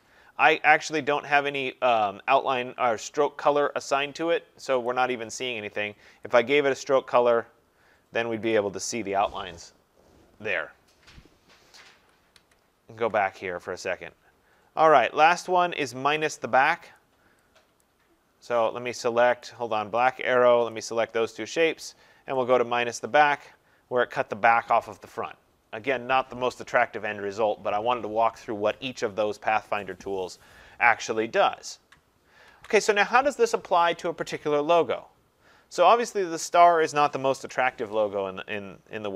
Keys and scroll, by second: 11.8 ctrl+z, 32.5 ctrl+z, 37.3 Delete.